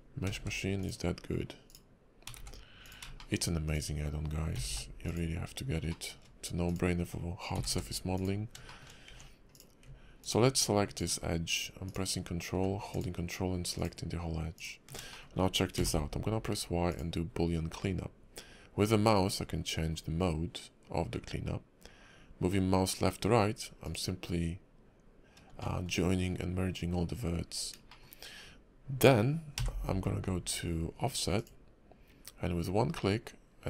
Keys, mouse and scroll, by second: 0.2 g, 1.6 click, 2.2 g, 3.2 shift+middle click, 3.7 click, 4.5 g, 5.9 shift+middle click, 6.6 click, 7.5 g, 8.6 shift+middle click, 9.1 Tab, 9.5 click, 10.2 ctrl+click, 11.0 click, 11.9 click, 12.5 ctrl+z, 12.9 ctrl+click, 13.7 ctrl+click, 14.5 ctrl+click, 15.1 shift+middle click, 15.8 y, 25.6 shift+middle click, 27.9 shift+middle click, 29.6 y.